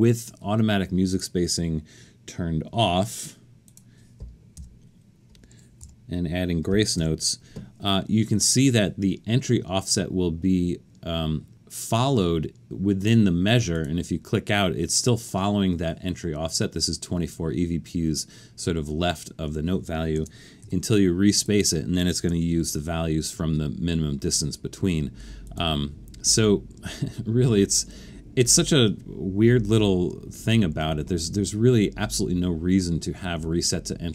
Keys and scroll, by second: 4.6-7.0 typing, 19.2 Escape, 20.1 super+a, 20.6 4, 22.3 alt+super+a, 30.3 alt+super+a.